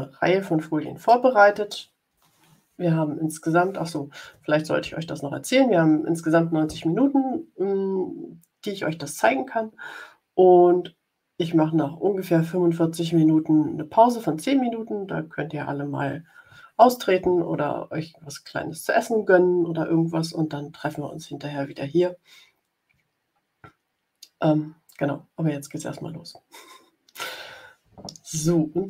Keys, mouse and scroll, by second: 1.4 scroll up 1.